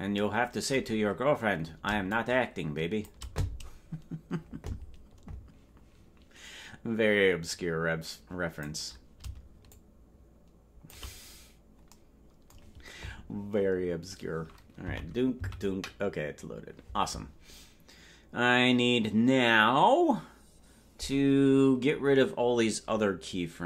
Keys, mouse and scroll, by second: 2.1-3.1 shift+drag, 7.5-8.7 drag, 9.7-11.0 shift+drag, 11.3-11.9 scroll up 3, 14.9 Left, 15.5 Right.